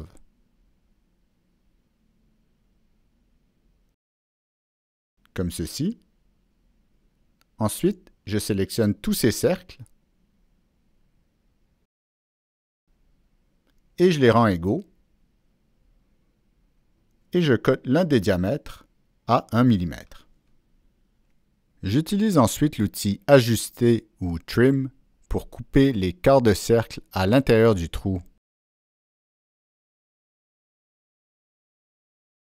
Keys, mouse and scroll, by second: 0.8 click, 1.5 click, 2.8 click, 3.4 click, 4.7 click, 5.5 click, 6.5 click, 7.2 click, 8.0 Escape, 9.8 ctrl+click, 10.4 ctrl+click, 11.2 ctrl+click, 12.2 ctrl+click, 12.2 ctrl+Escape, 13.2 ctrl+click, 15.8 click, 17.1 right click, 17.1 ctrl+click, 18.9 click, 19.7 click, 20.4 click, 20.4 right click, 20.6 click, 20.6 right click, 20.9 Return, 20.9 right click, 20.9 click, 22.9 Return, 22.9 Escape, 22.9 click, 23.4 right click, 24.9-25.3 drag, 25.9-26.6 drag, 27.3 click, 27.5 right click, 29.2 click, 30.2-30.9 drag, 31.4-32.3 drag.